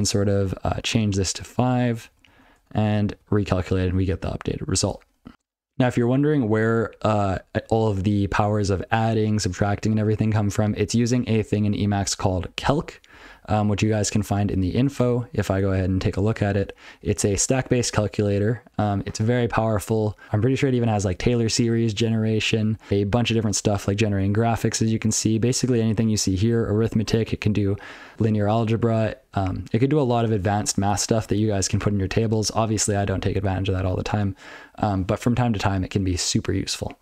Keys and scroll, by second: 1.0 5, 1.5 ctrl+n, 1.7 ctrl+n, 1.8 ctrl+n, 2.0 ctrl+n, 2.1 ctrl+n, 2.3 ctrl+n, 2.6 ctrl+n, 2.7 ctrl+n, 3.1 ctrl+c, 3.7 ctrl+p, 3.9 ctrl+p, 4.1 ctrl+n, 6.4 ctrl+p, 6.7-7.6 ctrl+f, 7.8-8.2 ctrl+p, 10.3-10.6 ctrl+n, 10.8 ctrl+n, 11.0 ctrl+n, 11.5 ctrl+n, 11.8 ctrl+p, 12.4 ctrl+n, 13.1 ctrl+p, 13.9 ctrl+n, 15.0 ctrl+o, 15.6-16.3 ctrl+n, 16.3 ctrl+v, 16.5 ctrl+v, 22.9 ctrl+p, 23.5-23.8 ctrl+f, 24.0 ctrl+n, 24.9 ctrl+f, 25.0 ctrl+n, 25.3-25.7 ctrl+p, 25.8-26.4 ctrl+n, 26.5 ctrl+p, 26.7 ctrl+n, 26.9 ctrl+p, 27.3 ctrl+n, 30.3 ctrl+p, 30.4 ctrl+n, 31.2-31.5 ctrl+p, 31.8 ctrl+n, 32.0 ctrl+n, 34.9 ctrl+n, 35.2 ctrl+n, 36.5 ctrl+n.